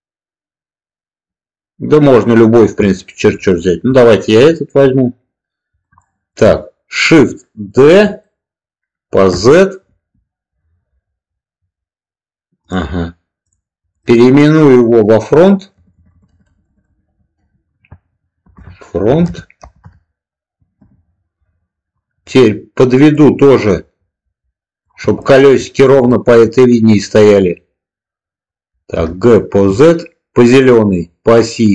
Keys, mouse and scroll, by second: 2.8-3.4 middle drag, 3.8 click, 5.9 shift+middle click, 7.7 shift+d, 9.2 z, 9.8 Return, 13.8 click, 13.9-21.4 drag, 15.9 BackSpace, 23.0-24.7 drag, 25.1-25.4 shift+middle drag, 26.1 shift+middle click, 28.8 g, 29.4 z.